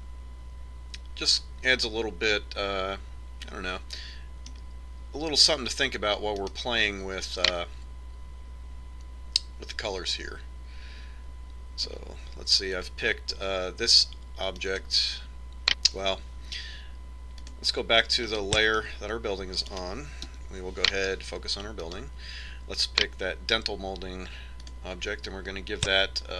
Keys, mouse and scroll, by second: 0.5-2.3 middle drag, 7.9-9.4 right drag, 16.0-17.6 right drag, 18.4-20.2 drag, 19.4-21.2 middle drag, 20.8-22.1 right drag, 21.3 KP_Decimal, 22.3 right click, 22.9-24.9 right drag, 25.7-26.3 drag.